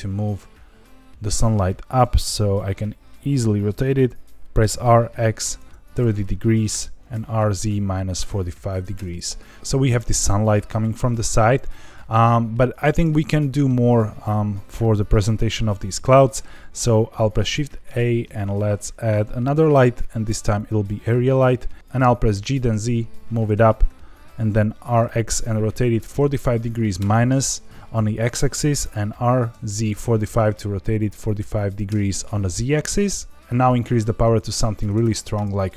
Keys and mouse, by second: 1.2 click, 4.5 r, 4.9 x, 5.4 KP_3, 5.5 KP_0, 6.7 KP_Enter, 7.1 r, 7.3 z, 7.8 KP_Subtract, 8.1 KP_4, 8.2 KP_5, 8.9 KP_Enter, 17.2 shift+a, 22.3 g, 22.5 z, 23.3 click, 23.8 r, 24.4 x, 25.1 KP_4, 25.2 KP_5, 25.6 KP_Subtract, 26.9 KP_Enter, 28.7 r, 29.5 z, 29.9 KP_4, 30.0 KP_5, 31.8 KP_Enter, 33.3-35.7 drag, 34.9 KP_0.